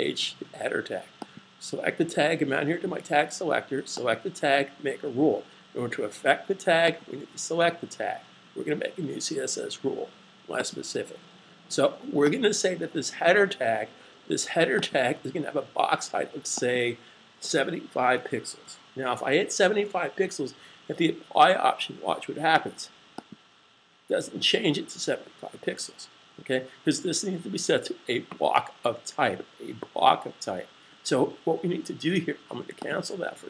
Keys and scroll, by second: 18.0-18.4 typing.